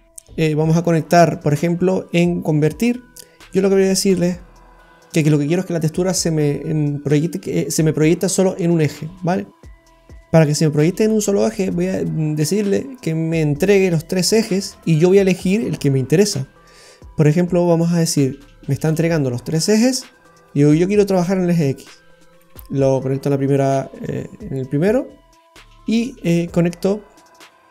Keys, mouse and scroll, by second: 21.3 click, 25.9 click.